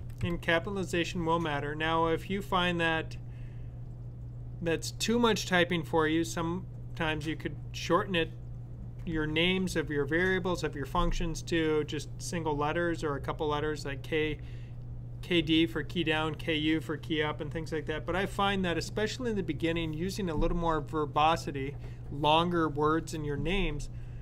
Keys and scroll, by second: 0.0-0.5 typing.